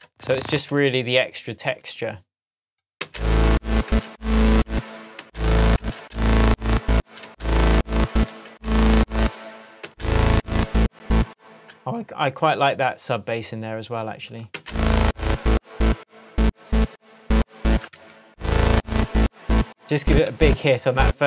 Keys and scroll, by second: 3.0 space, 11.5 space, 14.5 space, 17.9 super+d, 20.3 super+d.